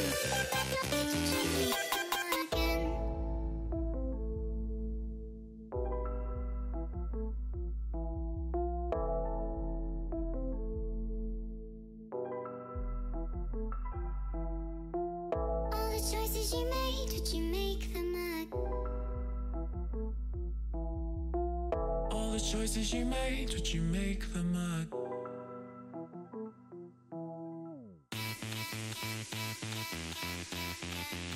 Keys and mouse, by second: 1.7 click, 3.1 click, 4.8 click, 5.5 click, 6.5 click, 7.2 click, 8.5 click, 10.0 click, 10.4 click, 11.7 click, 12.3 click, 13.2 Return, 14.0 click, 15.5 click, 15.9 click, 17.1 click, 20.1 Return, 20.6 click, 23.3 ctrl+t, 23.5 click, 24.8 click, 25.6 click, 27.1 Return, 28.6 click, 30.2 click, 31.3 click.